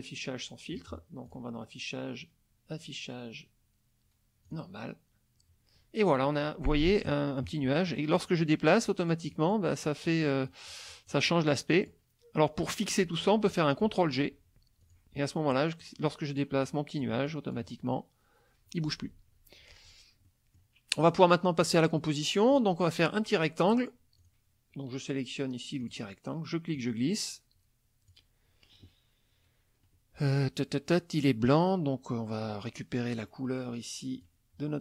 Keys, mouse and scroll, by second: 1.3 click, 4.5 click, 7.0 click, 7.9 click, 10.5 click, 14.8 click, 15.5-16.0 drag, 16.1-16.6 drag, 16.6-17.2 drag, 17.3-17.7 drag, 19.8 ctrl+click, 20.3 ctrl+middle click, 21.0 middle click, 21.7 middle click, 22.6 middle click, 24.2 click, 25.8 click, 26.7-28.3 drag, 34.2 click.